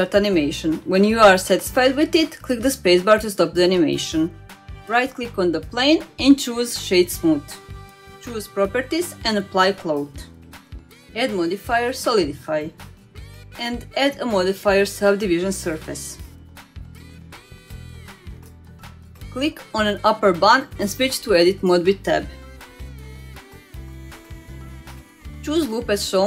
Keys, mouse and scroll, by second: 0.3 space, 1.4 space, 2.4 space, 3.1 click, 3.6-5.2 middle drag, 5.7 click, 6.2 right click, 7.1 click, 8.7 click, 9.6-10.2 drag, 11.0-13.3 drag, 13.8-15.3 middle drag, 15.5-16.4 scroll up 1, 16.4-18.7 drag, 16.4 scroll up 1, 19.5-20.1 middle drag, 20.2 scroll down 2, 20.5-21.9 middle drag, 21.9 scroll up 1, 22.1 click, 22.4-23.1 scroll down 2, 23.3 click, 23.6 shift+middle drag, 24.5 Tab, 24.9 shift+middle click.